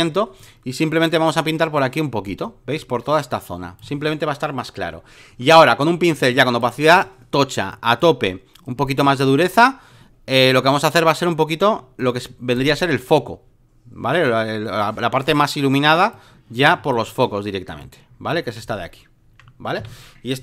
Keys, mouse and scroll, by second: 6.1 click, 6.9 right click, 7.7-11.0 drag, 12.0 click, 12.5 shift+click, 14.2-16.7 drag, 16.9 shift+click, 17.8 click, 18.7 alt+middle click, 19.8 v.